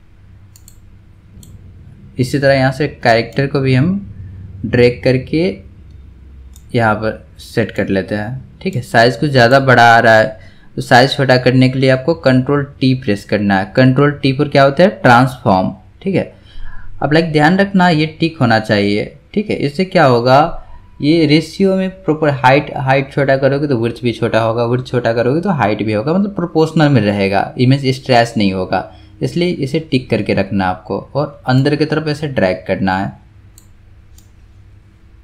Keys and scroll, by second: 13.5 ctrl+t.